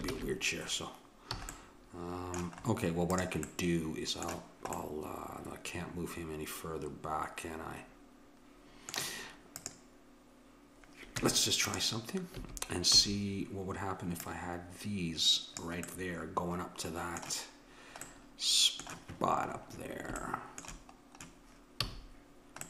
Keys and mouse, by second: 0.1 ctrl+z, 1.6 a, 3.2-5.2 drag, 5.5-6.5 middle drag, 9.6-11.5 drag, 11.2 Tab, 12.4 a, 13.0 a, 14.2-16.0 drag, 16.0 middle click, 17.1-18.5 middle drag, 21.9 a.